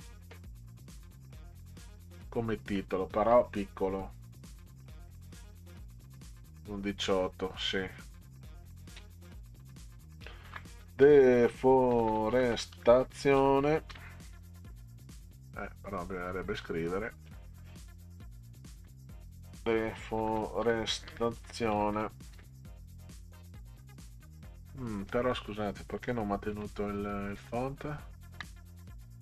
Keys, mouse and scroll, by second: 0.9 click, 2.1 click, 4.5 click, 4.7 click, 4.9 click, 5.2 click, 5.3 click, 10.2-14.8 typing, 15.4 click, 16.6 click, 18.5-23.2 typing, 26.5 ctrl+z, 27.4 ctrl+z, 28.9 click.